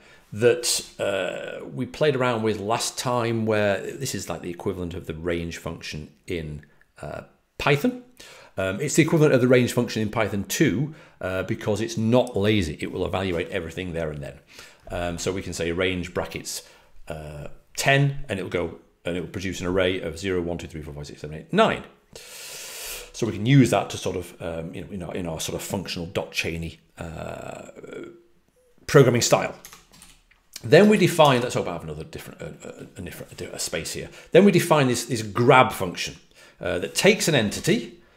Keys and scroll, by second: 29.9 j, 31.2 j, 37.1-38.0 typing.